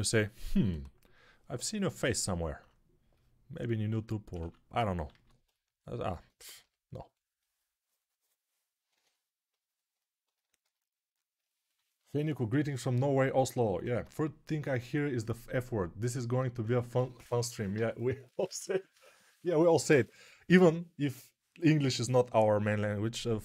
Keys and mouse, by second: 4.4 alt+q, 5.3 ctrl+alt+q, 6.5 g, 8.8 3.